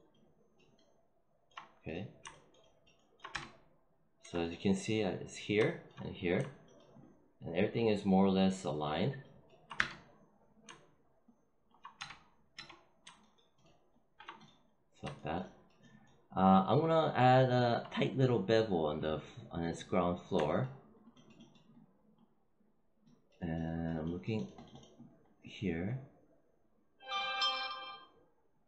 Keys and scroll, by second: 3.2 space, 9.7 space, 11.9 space.